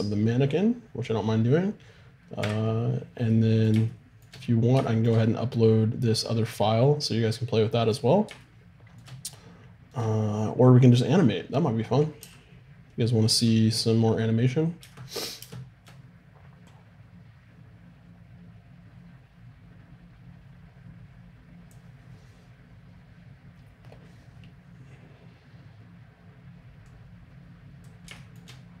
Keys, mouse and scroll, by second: 2.4 1, 3.1-4.7 middle drag, 9.9-11.7 right drag, 12.2 r, 15.4 shift+space, 16.7-18.5 drag, 26.9-28.8 drag.